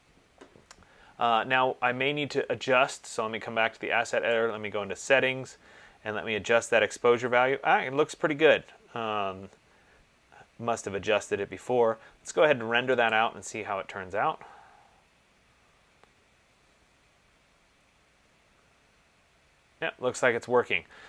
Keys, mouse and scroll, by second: 4.6 click, 13.3 click.